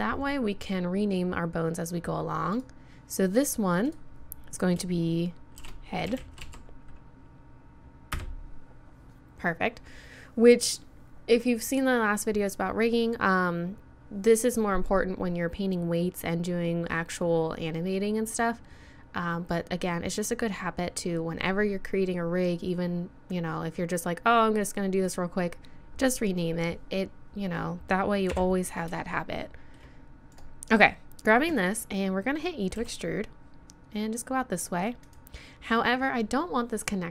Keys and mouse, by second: 0.1 middle click, 0.2-2.2 drag, 5.9-28.3 middle drag, 28.3 KP_1, 29.1-30.3 middle drag, 32.8 e.